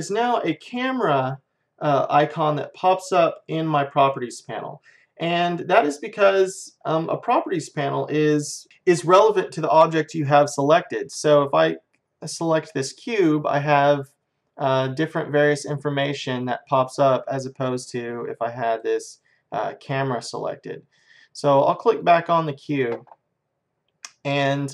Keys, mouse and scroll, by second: 0.4-2.3 drag, 11.4-13.3 drag, 18.7-20.6 drag, 22.0-23.8 drag.